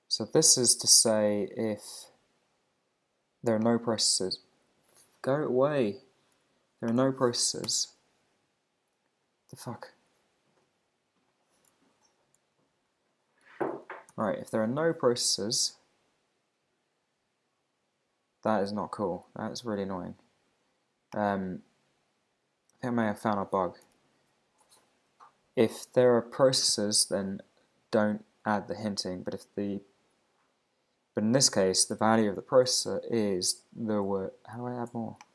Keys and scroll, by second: 7.7 super+c, 8.3 Right, 11.9 alt+shift+Left, 14.1 super+c.